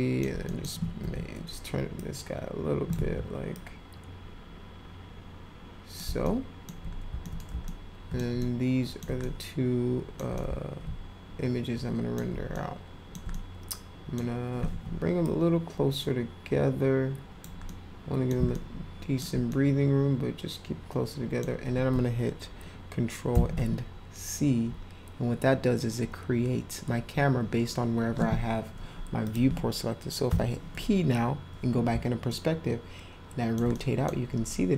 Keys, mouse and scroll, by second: 0.4 middle click, 1.0 e, 2.0 click, 2.9 ctrl+z, 3.5-6.0 drag, 6.2 alt+middle click, 7.2 alt+middle click, 7.6 alt+middle click, 8.4 ctrl+alt+middle click, 9.2 middle click, 10.4-12.1 alt+middle drag, 12.4 alt+middle click, 13.3-14.2 middle drag, 15.2-17.4 drag, 17.6 middle click, 18.5 ctrl+alt+middle click, 19.5-21.4 middle drag, 23.4 ctrl+c, 29.2 click, 32.2-33.5 alt+middle drag, 33.7 middle click.